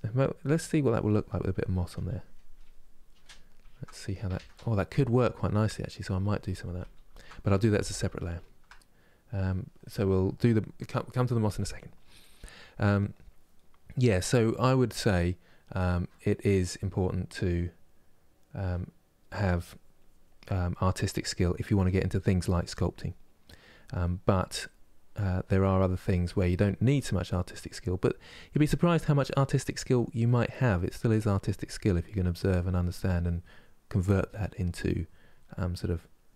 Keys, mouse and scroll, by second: 0.6-2.9 drag, 2.9-6.2 middle drag, 6.2 ctrl+z, 6.5 ctrl+z, 6.8 ctrl+z, 7.7-18.4 middle drag, 18.4-20.2 drag, 20.2 middle click, 20.6-21.7 drag, 21.7 middle click, 22.1 click, 22.8 middle click, 23.1 click, 23.7 middle click, 24.4 click, 24.8 middle click, 25.2 click, 25.8 middle click, 26.2 click, 27.0-28.0 middle drag, 28.0 click, 28.5 middle click, 29.0 click, 30.0 middle click, 30.4-31.4 drag, 31.4 middle click, 31.8 click, 32.5 middle click, 32.9-34.1 drag, 34.1 middle click, 34.5 click, 35.1 middle click, 35.5 click.